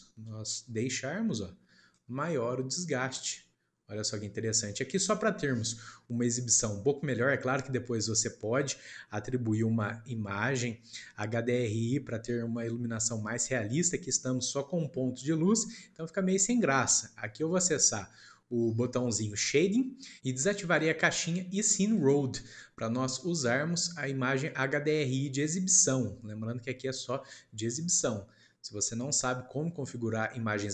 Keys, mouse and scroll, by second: 2.4 scroll down 4, 2.9-14.9 middle drag, 14.9-15.2 scroll down 1, 15.2 middle click, 15.7 scroll down 1, 15.8-16.7 scroll up 1, 16.7-19.4 shift+middle drag, 19.4 click, 26.4-27.1 scroll down 1, 27.1-30.7 middle drag.